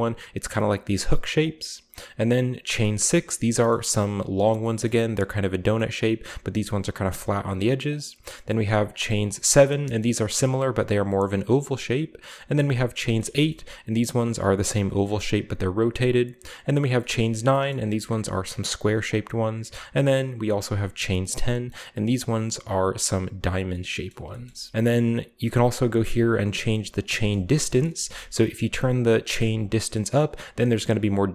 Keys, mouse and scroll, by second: 0.4-1.0 scroll up 1, 1.4-2.8 drag, 2.6-3.7 scroll down 2, 2.8-4.3 middle drag, 5.0-5.5 middle drag, 5.0-6.9 scroll up 1, 5.8-6.4 middle drag, 7.9-9.3 drag, 9.3-10.2 middle drag, 9.3-10.2 scroll down 1, 10.3-11.0 middle drag, 10.3-11.2 scroll up 1, 11.6 click, 12.6-13.0 drag, 13.0-15.7 shift+middle drag, 15.7 click, 17.0-19.0 middle drag, 17.4-19.0 scroll down 1, 19.0 click, 19.8-20.5 scroll up 1, 20.5-21.1 drag, 20.5 scroll up 1, 21.1-22.9 middle drag, 23.7-26.0 middle drag, 23.7-24.5 scroll down 1, 26.2 shift+click, 26.8 shift+middle click, 27.2-28.3 scroll down 3, 28.7-31.3 shift+middle drag.